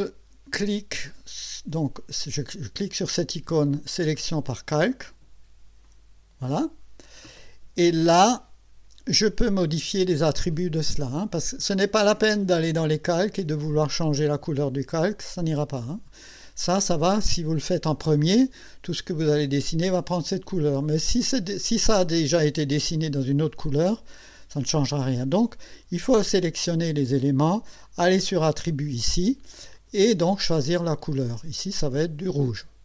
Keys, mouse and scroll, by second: 4.1 click, 5.8 click, 12.3 click, 28.5 click, 29.7 click, 30.8 click, 31.9 click.